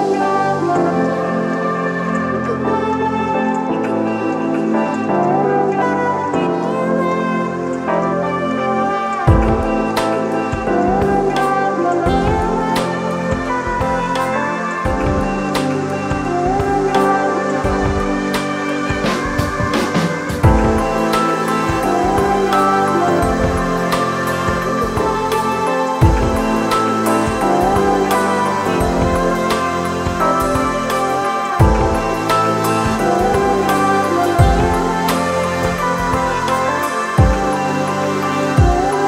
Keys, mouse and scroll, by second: 0.7 alt+shift+click, 5.8 ctrl+click, 23.9 ctrl+d, 37.3 ctrl+d.